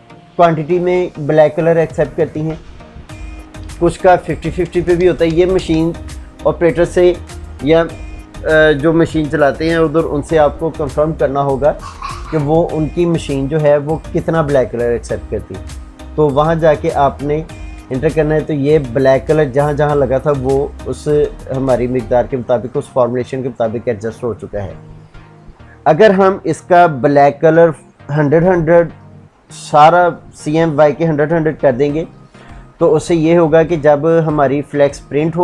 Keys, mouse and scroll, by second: 3.3 shift+Tab, 4.6 Tab.